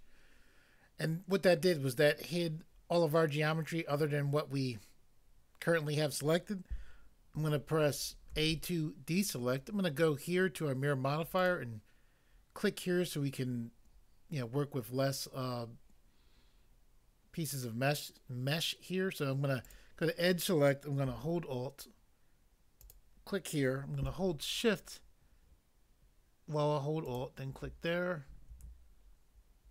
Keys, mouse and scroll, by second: 8.3 a, 11.4 click, 19.7 click, 22.9 alt+click, 27.1 alt+click.